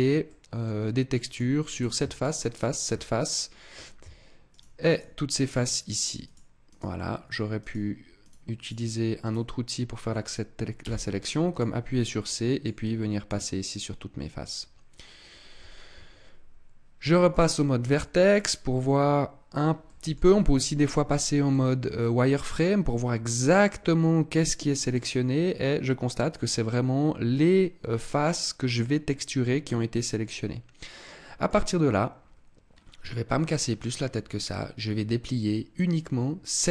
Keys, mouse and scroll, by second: 0.3 middle click, 1.2 click, 1.7 right click, 2.1 shift+right click, 2.4 right click, 3.1 middle click, 4.4 shift+right click, 4.8 shift+right click, 5.2 shift+right click, 5.6 shift+right click, 6.2 shift+right click, 6.6 shift+right click, 7.5 shift+right click, 8.1 shift+right click, 8.5 shift+right click, 9.1 shift+right click, 10.7 c, 17.2 click, 17.9 middle click, 19.9 middle click, 20.1 z, 21.4 middle click, 24.9 middle click, 31.7-32.7 scroll down 4, 32.7-33.2 scroll up 2, 33.2 scroll down 1.